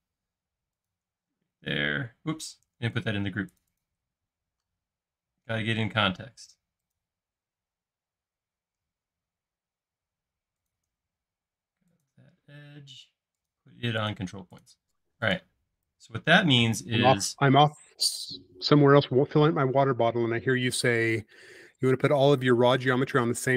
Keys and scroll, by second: 1.4 shift+space, 2.8 super+z, 4.4 |, 11.2 space.